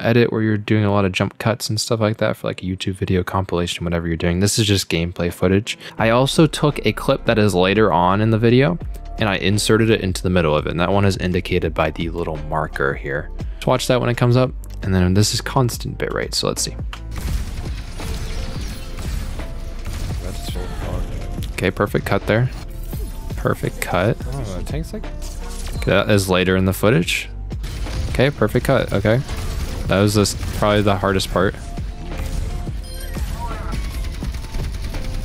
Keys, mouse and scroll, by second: 13.3-13.6 ctrl+scroll down 2, 16.8 space.